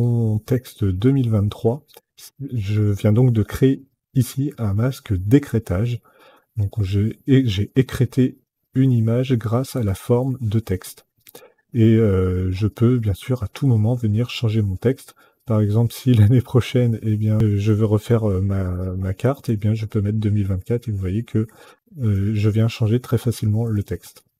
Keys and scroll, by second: 19.1 KP_4, 23.3 ctrl+z.